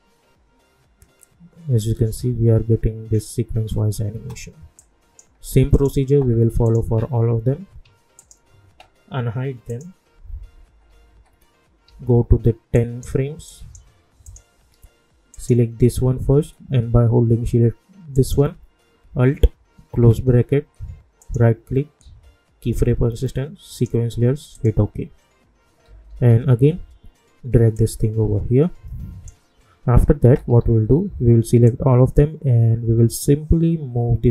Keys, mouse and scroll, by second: 4.1 space, 4.8 click, 6.9-7.7 scroll down 1, 8.1 shift+click, 10.7 =, 10.8 =, 11.1 =, 11.8 =, 12.7 click, 18.1 shift+click, 19.9 alt+], 21.2 right click, 23.7 click, 25.8 -, 26.3 -, 26.5 -, 27.7-30.2 drag, 30.2 =, 30.4 =, 31.9-34.3 drag.